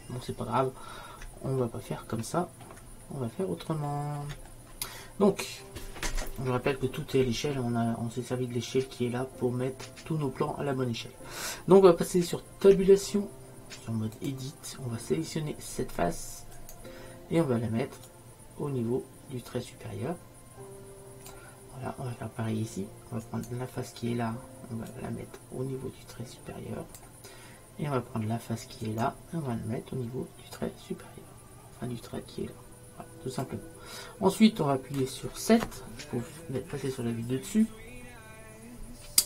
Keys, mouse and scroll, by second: 1.5-4.2 middle drag, 5.7-12.8 middle drag, 12.8 Tab, 16.7-18.2 middle drag, 18.4-20.1 drag, 23.3-25.0 drag, 25.3-26.9 drag, 28.9-30.6 drag, 30.7-32.5 drag.